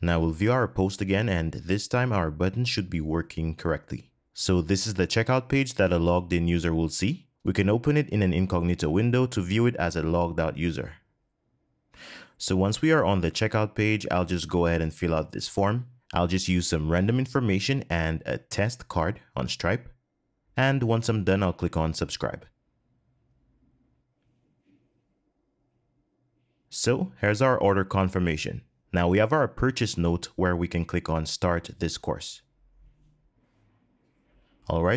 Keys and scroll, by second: 17.7 super+v, 18.9 Tab, 19.2 Tab.